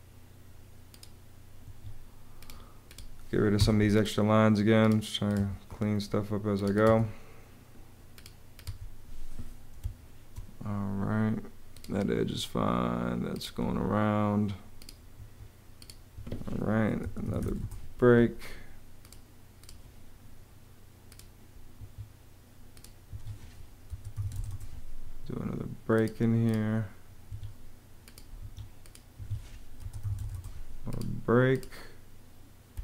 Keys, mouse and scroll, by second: 1.4 Escape, 3.4 BackSpace, 5.2 BackSpace, 6.7 BackSpace, 8.4 BackSpace, 9.6 space, 12.0 Escape, 13.5 Escape, 15.1 Escape, 16.6-17.8 typing, 22.9 Escape, 23.5-24.7 typing, 27.1 Escape, 29.4-30.5 typing, 32.6 space.